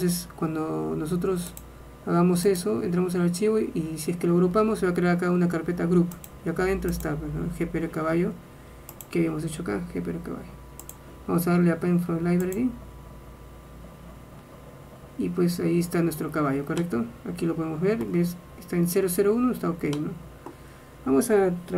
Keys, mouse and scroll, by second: 13.4 click, 15.4-17.0 middle drag, 20.1-21.7 middle drag.